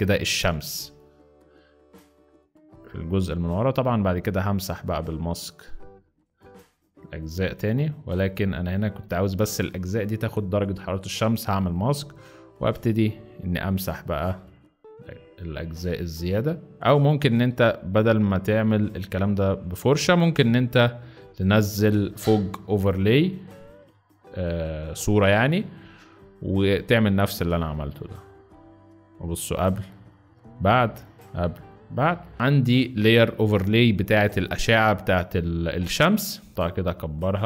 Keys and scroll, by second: 12.5 x, 21.5 z, 32.0 space, 32.3 z.